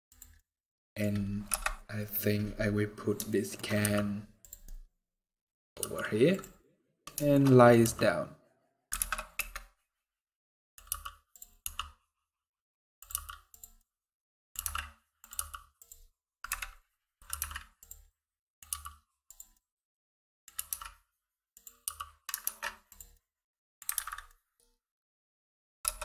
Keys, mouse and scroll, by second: 0.1 middle click, 0.8 scroll down 1, 1.2 KP_0, 2.7 scroll down 3, 3.0 shift+middle click, 3.5 g, 4.4 middle click, 4.8 scroll down 1, 5.0 middle click, 5.5 g, 6.3 middle click, 6.6 scroll down 1, 6.9 shift+middle click, 7.1 middle click, 7.5 r, 10.1 middle click, 10.6 g, 11.3 r, 12.9 g, 13.5 middle click, 14.3 r, 15.1 g, 16.2 KP_Decimal, 17.0 r, 17.8 middle click, 18.4 g, 19.2 middle click, 20.3 r, 21.6 g, 22.8 middle click, 23.8 alt+a, 23.8 scroll down 3, 24.0 middle click, 25.1 scroll up 2, 25.6 KP_0.